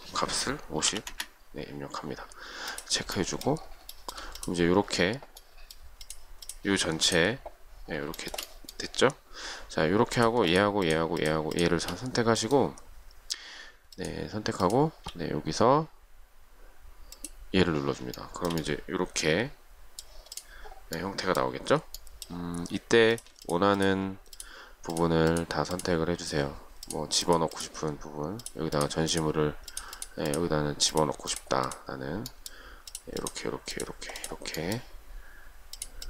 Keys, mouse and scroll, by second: 0.8-1.6 typing, 4.2 shift+middle click, 8.5 shift+middle click, 10.7 shift+click, 10.8 shift+double click, 11.1 shift+click, 11.4 shift+click, 11.5 shift+double click, 11.8 shift+click, 14.2 shift+click, 18.4 shift+middle click, 23.6 shift+click, 23.8 shift+double click, 24.0 shift+click, 25.6 shift+click, 27.4 shift+click, 27.8 shift+click, 27.9 shift+double click, 28.6 shift+click, 28.9 shift+click, 29.1 shift+double click, 29.3 shift+click, 29.9 shift+click, 30.2 shift+click, 30.5 shift+click, 30.6 shift+double click, 31.2 shift+click, 31.5 shift+click, 31.7 shift+double click, 31.9 shift+click, 32.6 shift+middle click, 33.1 shift+click, 33.4 shift+click, 33.6 shift+double click, 34.0 shift+click, 34.4 shift+click, 34.5 shift+double click, 34.8 shift+middle click, 35.9 shift+click.